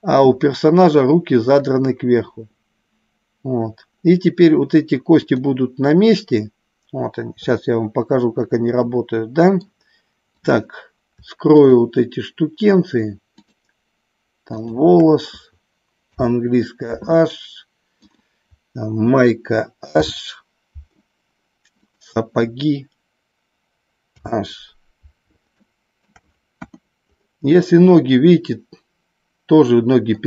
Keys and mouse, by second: 5.3 click, 8.8 middle click, 10.4 click, 11.5 shift+click, 14.6 shift+click, 16.0 h, 18.0 click, 19.9 h, 21.8 click, 24.0 h, 25.5-26.0 shift+middle drag, 26.5 KP_1, 27.9-30.2 middle drag.